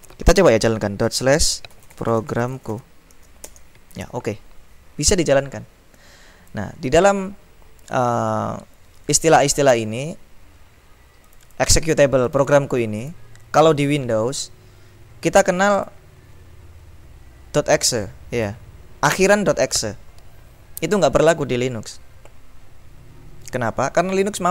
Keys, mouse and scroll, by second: 1.2-3.4 typing, 3.6 Return, 6.1-7.7 drag, 11.3 click, 12.4 click, 15.7 click, 18.4 click.